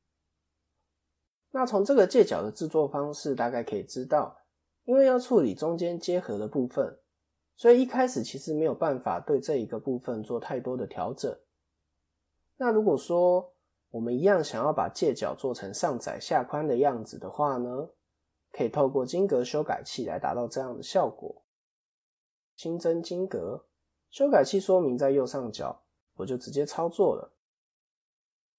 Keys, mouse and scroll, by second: 0.0 scroll up 1, 0.0 KP_7, 0.8-1.3 scroll down 1, 3.9 click, 4.4-5.7 scroll up 1, 6.8 scroll down 2, 6.9-7.6 scroll down 1, 12.0 KP_3, 22.5 shift+a, 23.7 KP_1, 24.5 s, 28.2 KP_3.